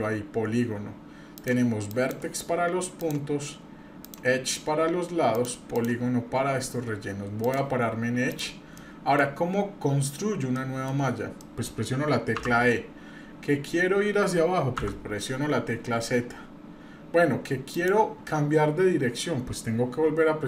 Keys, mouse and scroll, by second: 1.3 click, 1.9 click, 3.0 click, 4.0 click, 5.3 click, 5.7 click, 7.4 click, 8.3 click, 8.8 middle click, 10.6 shift+middle click, 11.1 scroll down 1, 11.4 middle click, 12.4 e.